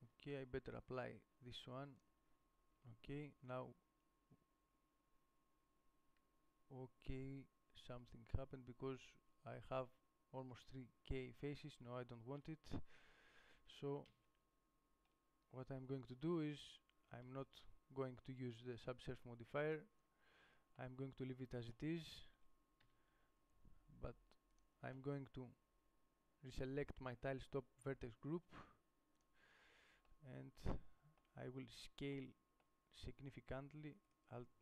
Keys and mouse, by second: 0.6 Tab, 2.2-7.8 drag, 3.0 Tab, 12.0 Tab, 12.6 Tab, 13.2 Tab, 13.9 ctrl+z, 14.5 ctrl+z, 17.5 ctrl+z, 20.6 Tab, 23.1 a, 33.5 s.